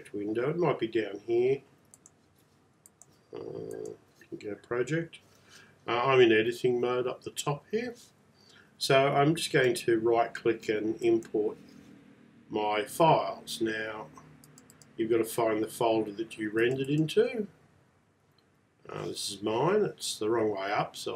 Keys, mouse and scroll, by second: 2.9 click, 9.5 right click, 11.1 click.